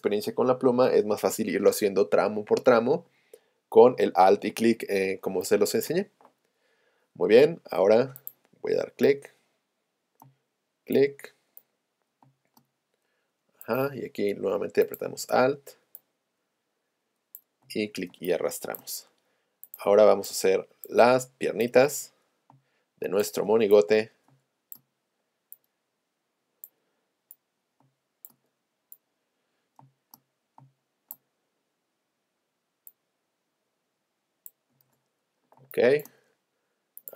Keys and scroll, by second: 5.0 space, 10.2 space, 12.3 space, 22.6 space, 24.3 space, 27.8 space, 29.9 space.